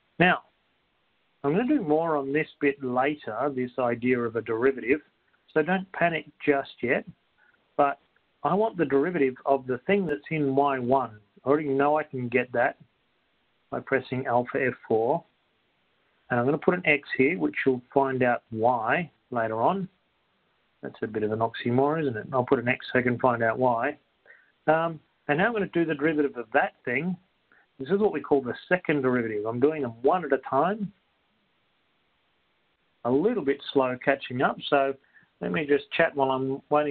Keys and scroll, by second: 32.7 Right, 32.7 2, 35.3-36.1 typing.